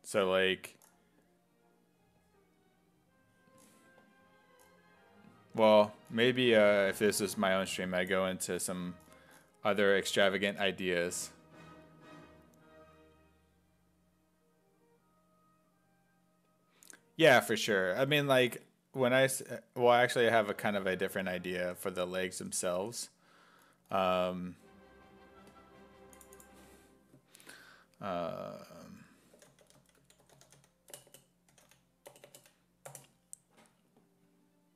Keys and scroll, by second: 27.5 ctrl+a, 29.4-32.4 typing, 32.9 Return.